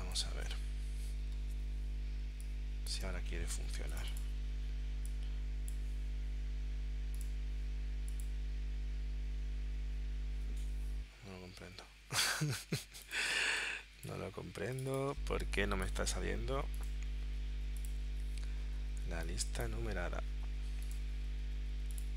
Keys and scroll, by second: 2.3 space, 13.4 space.